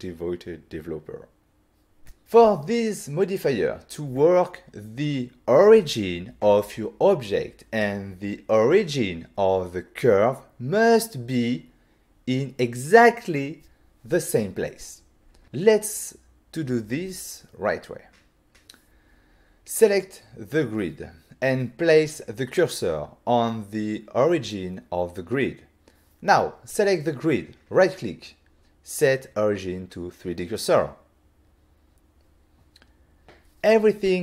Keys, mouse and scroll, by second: 19.9 shift+s, 25.0 click, 25.8 click, 29.4 click, 29.5 click, 29.9 click, 30.0 click, 31.5 right click, 32.1 double right click, 33.5 click, 33.6 click.